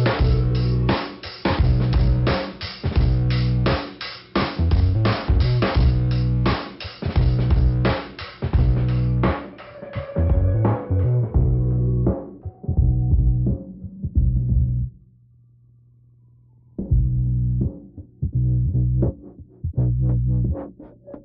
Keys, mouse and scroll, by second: 0.7-1.1 scroll down 1, 1.9 click, 2.6-3.1 scroll up 2, 3.1 click, 4.1 scroll down 1, 6.0 middle click, 6.8 click, 7.7 click, 9.3 click, 11.4 click, 13.1 click, 15.9 click, 16.7 click, 17.4 click, 18.1 click, 20.0 click, 20.8 click.